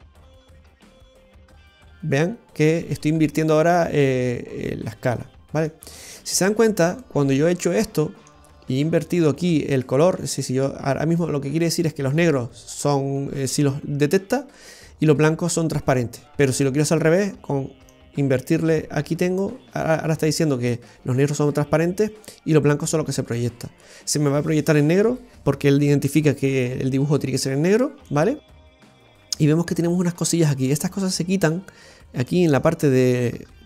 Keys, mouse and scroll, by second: 3.8 middle click, 3.8-4.8 scroll down 2, 7.0 middle click, 10.4 click, 17.9 click, 28.1 middle click, 30.7 middle click, 32.0-32.3 scroll up 2, 32.3 middle click, 33.0-33.6 scroll up 3.